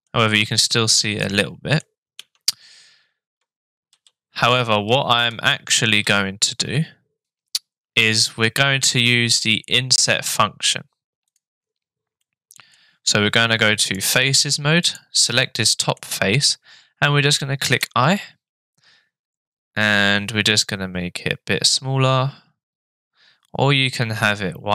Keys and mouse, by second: 1.2-1.8 middle drag, 2.2 Tab, 3.9 ctrl+z, 5.5 ctrl+z, 6.1 ctrl+z, 7.2 ctrl+r, 12.3 middle click, 13.8 click, 14.8 click, 15.4 middle click.